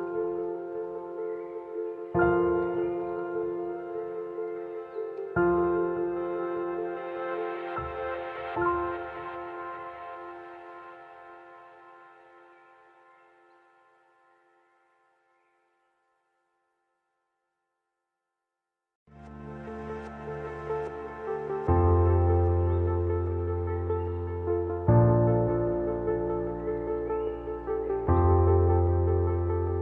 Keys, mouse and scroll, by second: 0.1 click, 1.2 alt+scroll down 1, 1.4 space, 1.5 click, 1.5 space, 2.7 click, 2.8 t, 3.5-3.8 scroll down 1, 3.8 click, 4.3 Right, 4.8 alt+scroll up 1, 5.0-7.1 alt+drag, 7.5 click, 8.4 alt+scroll up 1, 8.6-10.1 typing, 8.6 click, 8.9 click, 10.1 click, 10.6 alt+scroll down 1, 11.0-12.9 alt+drag, 12.9 t, 12.9 scroll down 1, 13.1-15.7 drag, 16.3 shift+click, 16.7 ctrl+z, 16.7-18.1 drag, 18.6 click, 18.7 alt+scroll up 1, 18.8 scroll down 1, 21.6 click, 25.7 click.